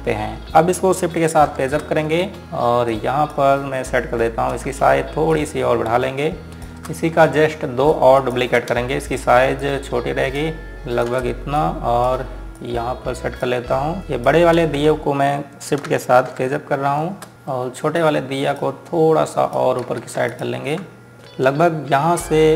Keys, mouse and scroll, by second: 1.9 shift+Num_Lock, 2.2 shift+Page_Up, 2.9 click, 4.6-5.4 scroll down 1, 6.1 shift+click, 8.0 scroll up 1, 8.7 click, 9.0 ctrl+right click, 10.4 click, 11.3 shift+click, 12.3 click, 15.4 z, 17.0 Page_Up, 17.3 click, 17.6 ctrl+z, 18.7 click, 20.6 ctrl+z, 21.1 ctrl+alt+click, 21.1 Up.